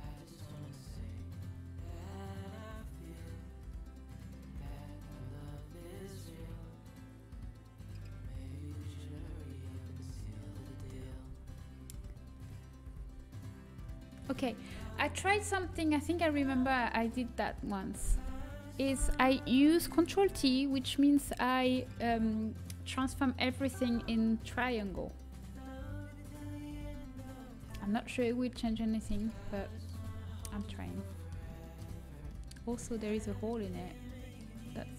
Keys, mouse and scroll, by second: 4.4-7.6 middle drag, 9.6 middle click, 10.7 a, 11.2 a, 12.8 ctrl+t, 16.9 middle click, 29.2 middle click, 29.7-31.7 middle drag, 31.9 middle click, 32.5 Tab, 33.0 middle click, 33.5 Tab, 34.6-34.9 middle drag.